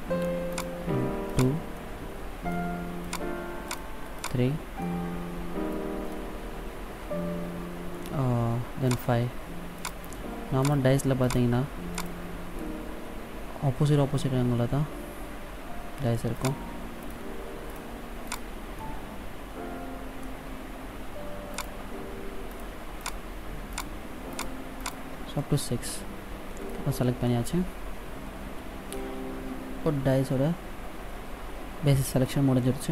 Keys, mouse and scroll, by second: 0.7 shift+right click, 1.4 shift+right click, 1.9 middle click, 3.2 shift+right click, 3.8 shift+right click, 4.4 shift+right click, 5.0 middle click, 9.1 shift+right click, 10.0 shift+right click, 10.9 shift+right click, 11.4 shift+right click, 12.1 shift+right click, 12.8 middle click, 16.6 shift+right click, 17.2 shift+right click, 17.8 shift+right click, 18.4 shift+right click, 19.0 middle click, 21.7 shift+right click, 22.8 shift+right click, 23.3 shift+right click, 23.9 shift+right click, 24.6 shift+right click, 25.1 shift+right click, 25.6 middle click, 27.4 middle click.